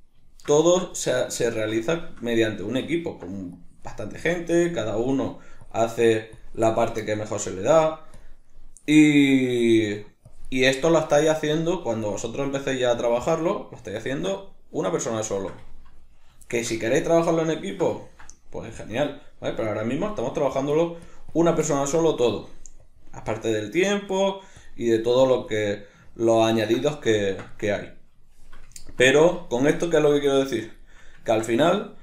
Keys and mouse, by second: 0.3-3.6 shift+middle drag, 3.6-6.7 drag, 6.7-7.5 shift+middle drag, 7.5-8.5 drag, 8.5-9.3 middle drag, 9.3-10.9 drag, 10.9-12.1 middle drag, 12.1-12.5 drag, 12.5-18.7 middle drag, 18.7-21.7 drag, 21.7-22.9 middle drag, 22.9-24.0 drag, 24.0-24.6 middle drag, 24.6-26.0 drag, 26.0-32.0 ctrl+middle drag.